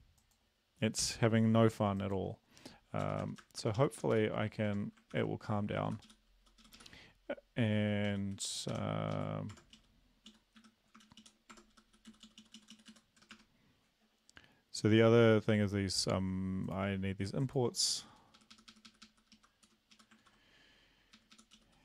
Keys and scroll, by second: 3.0 Return, 3.2 Return, 3.4 Return, 3.6 Return, 3.7 Up, 3.9 Up, 4.1 Up, 4.7 Tab, 5.1 ctrl+v, 5.9 Up, 6.0 Up, 6.6 Up, 6.7 Up, 8.1 Down, 8.3 Down, 8.7 Home, 9.1 Up, 9.5 Tab, 9.8 Down, 10.3 Down, 10.6 Home, 11.0 shift+Down, 11.2 shift+Down, 11.5 Tab, 11.7 Up, 11.9 Up, 12.1 Down, 12.2 Down, 12.4 Down, 13.1 Down, 13.2 BackSpace, 13.3 BackSpace, 18.3 Up, 18.3 Up, 18.5 Up, 18.7 Up, 18.8 Up, 19.3 Up, 19.3 Left, 19.6 Return, 19.9 Up, 20.2 ctrl+v, 21.1 Up, 21.3 Up, 21.5 Down.